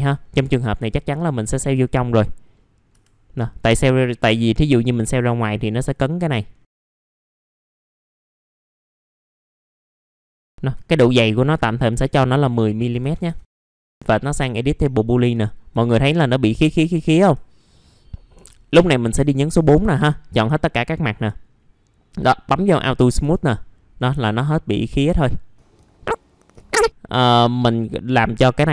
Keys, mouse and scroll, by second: 0.2 alt+middle click, 1.6 F4, 2.0 middle click, 2.5-2.9 scroll up 1, 3.2 middle click, 4.8 click, 6.8 right click, 7.0 scroll down 1, 7.8 scroll down 1, 7.9 middle click, 8.9 scroll down 1, 9.4 scroll up 1, 10.1 middle click, 10.1 scroll down 1, 10.4 scroll up 1, 10.5 alt+middle click, 11.8 click, 12.9 KP_1, 13.5 middle click, 14.5 middle click, 14.9 alt+middle click, 15.5 scroll up 1, 15.8 alt+middle click, 17.2 F4, 17.7 middle click, 20.8-23.6 drag, 24.1 F4, 25.1 alt+middle click, 25.6 scroll up 1, 25.7 F3, 25.8 middle click, 26.4 click, 26.5 F3, 26.6 middle click, 26.8-27.8 scroll up 1, 27.8 middle click.